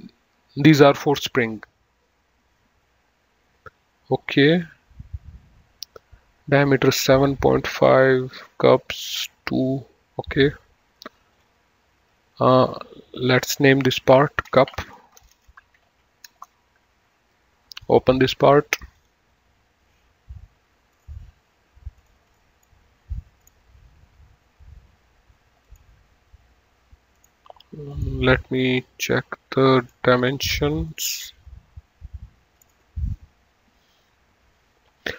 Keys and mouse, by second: 11.6 click, 13.5 click, 14.4 F2, 15.0-16.2 typing, 16.6 Return, 18.0 right click, 20.0 click.